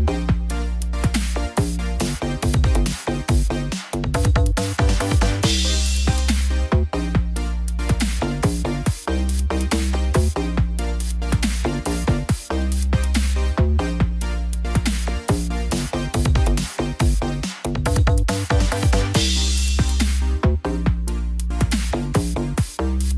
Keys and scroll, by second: 20.1 ctrl+0.